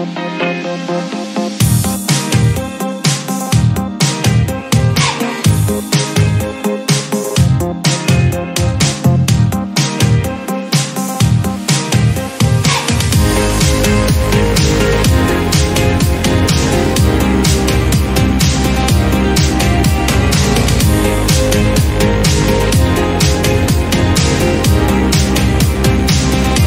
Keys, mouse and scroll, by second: 0.3 scroll down 2, 0.4 middle click, 0.6-1.0 scroll up 1, 1.0-2.1 middle drag, 2.1-2.8 scroll down 1, 2.8-3.7 drag, 3.9 scroll down 3, 4.0 middle click, 4.6 KP_1, 4.9-5.9 scroll up 1, 5.9-6.5 scroll up 1, 6.8 click, 7.4-9.2 right drag, 9.2 click, 9.4-10.3 right drag, 10.3 drag, 10.6 click, 11.1-11.6 scroll up 1, 11.6 scroll down 1, 11.9-12.4 shift+middle drag, 12.4 drag, 13.7 Tab, 14.2 alt+z, 14.5 scroll up 1, 14.8 1, 15.1 scroll up 2, 16.0 scroll down 1, 16.2 Tab, 16.5 click, 17.0 click, 17.3 Tab, 18.2 alt+z, 18.6 alt+z, 19.7 alt+z, 20.0 1, 20.9 click, 22.2 x, 24.1-25.2 shift+middle drag, 25.2 click, 26.1 x.